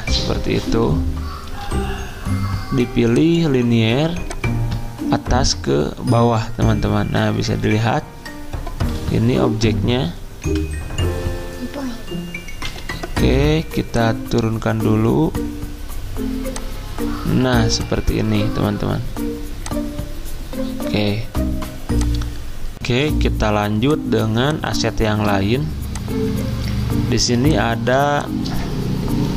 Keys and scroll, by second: 0.7 g, 5.2 g, 10.4 v, 12.6 g, 22.9 z.